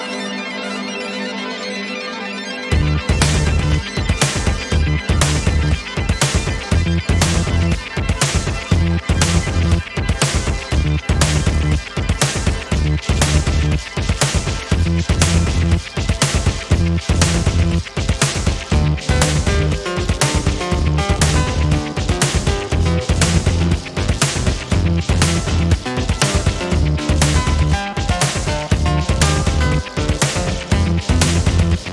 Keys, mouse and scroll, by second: 1.1 click, 1.6 click, 2.8 ctrl+scroll down 2, 3.5 ctrl+KP_5, 4.6-5.0 ctrl+scroll up 2, 7.2 ctrl+scroll up 2, 7.8 ctrl+click, 8.6 ctrl+click, 9.7 ctrl+click, 11.3 Right, 14.0 click, 14.8-15.6 ctrl+scroll down 4, 22.3-22.8 ctrl+scroll up 4, 24.3 click, 25.6-27.0 ctrl+shift+drag, 27.9 click, 28.6 shift+click, 30.5-31.9 ctrl+shift+drag.